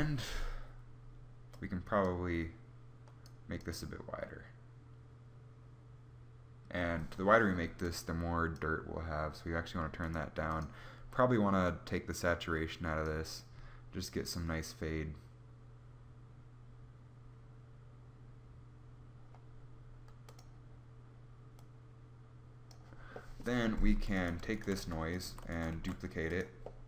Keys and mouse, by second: 1.2 click, 7.8 click, 21.9 click, 22.9 middle click, 24.4 g, 24.9 a, 25.6 shift+d.